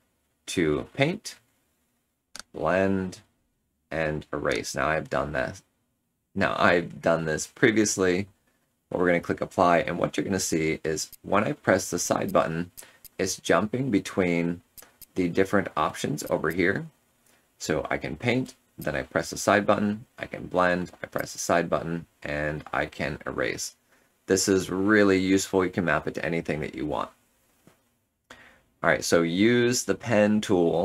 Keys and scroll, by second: 23.6 ctrl+z, 23.9 ctrl+z, 24.1 ctrl+z.